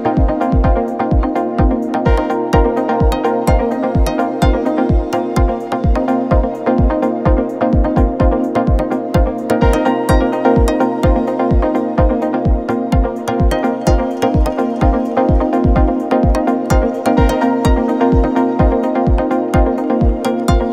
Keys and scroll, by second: 14.1 ctrl+t.